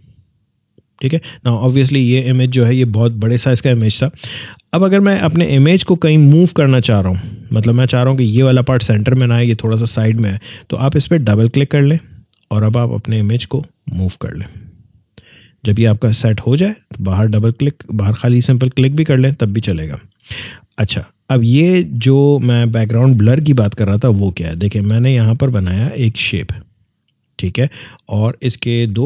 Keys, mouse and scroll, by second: 5.4 scroll down 1, 5.7 scroll up 1, 11.3-17.2 drag, 21.6 click, 24.5-28.8 drag.